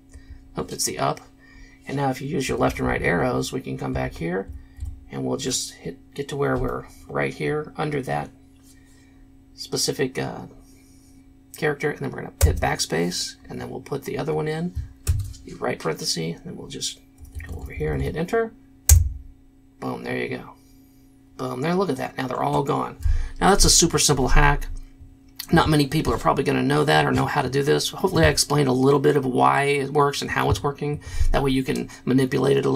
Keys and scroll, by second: 0.1 Up, 2.5 Left, 2.7 Left, 2.8 Left, 3.0-3.3 Left, 3.9 Left, 4.1 Left, 4.8 Right, 12.5 BackSpace, 15.0 shift+0, 17.2 Right, 17.3 Right, 17.5 Right, 17.6 Right, 17.8 Right, 17.8 Right, 18.9 Return.